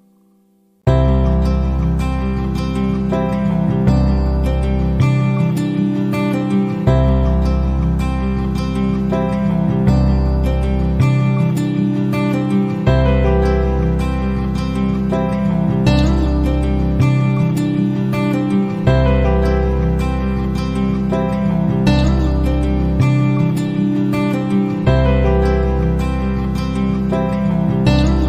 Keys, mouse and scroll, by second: 0.8 middle click, 2.9 KP_1, 3.2 KP_0, 3.7 KP_Enter, 6.1 click, 6.9 ctrl+d, 9.3 click, 10.6-12.8 right drag, 13.5 middle click, 15.2 click, 16.4 click, 17.2 middle click, 17.6 click, 18.5 click, 20.7 click, 22.5 click, 24.4 click, 26.9 click, 27.8 click, 28.0-28.2 middle drag.